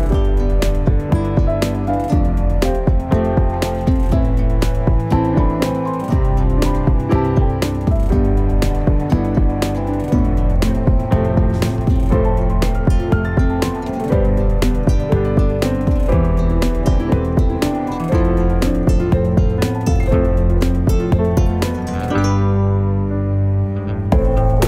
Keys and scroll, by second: 21.2 F10.